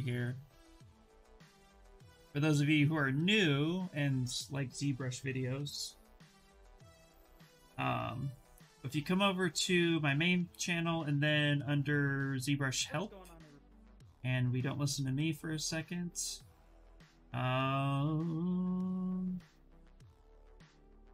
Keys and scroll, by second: 5.3 Return.